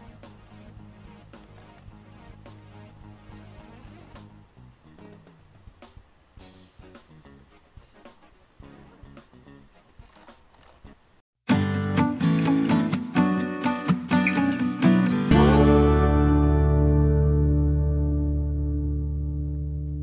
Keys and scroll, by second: 2.7 F9.